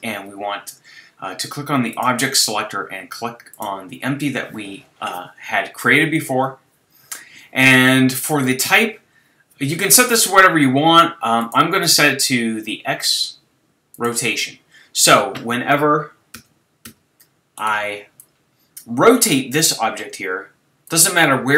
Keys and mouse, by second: 1.9-3.8 drag, 11.4-14.0 drag, 16.4 z, 16.9 z, 18.2 click, 18.8-19.9 drag, 19.9 s, 21.2 g.